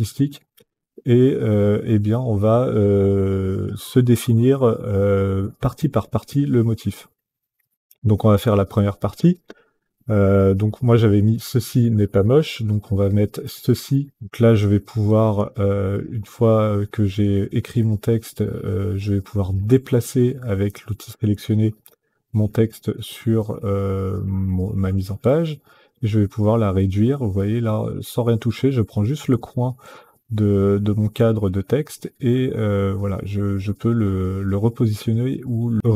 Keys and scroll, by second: 12.8-14.2 typing.